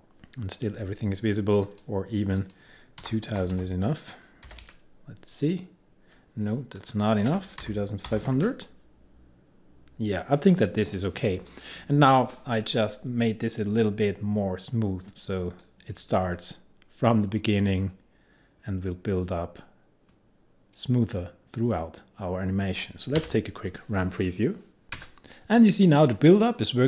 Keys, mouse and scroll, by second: 1.7 click, 2.8-4.5 typing, 6.8 click, 7.1-8.8 typing, 11.5-15.5 drag, 15.7-24.8 drag.